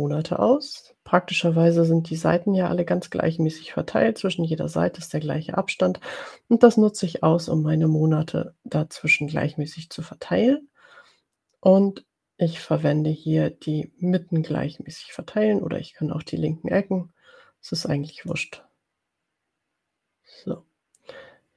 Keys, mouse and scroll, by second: 18.4 click.